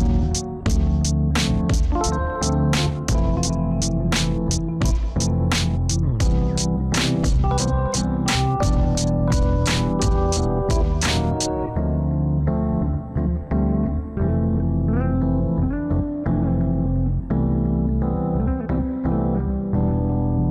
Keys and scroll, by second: 3.2 F3, 9.8 F3.